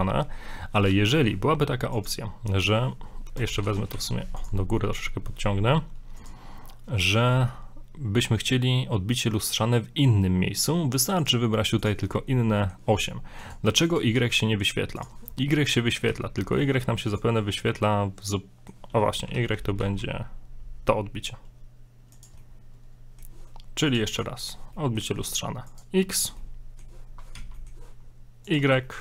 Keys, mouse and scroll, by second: 2.0 click, 3.5 middle click, 3.9 middle click, 4.1 g, 4.6 scroll down 2, 4.8 middle click, 6.2 click, 11.2 click, 11.8 click, 12.1 scroll down 4, 12.3 middle click, 13.4 click, 13.9 click, 14.2 z, 15.0 click, 15.4 scroll up 1, 15.8 middle click, 16.1 z, 16.3-16.7 scroll up 1, 17.1 click, 17.5 scroll down 6, 17.7 middle click, 18.8-19.1 scroll up 5, 19.1 middle click, 19.3 g, 22.4 middle click, 23.9 click, 24.1 click, 24.4 click, 24.8 middle click, 25.7 click, 26.4 middle click, 27.3 z, 27.5 middle click, 28.4 click, 28.8 click, 28.9 middle click.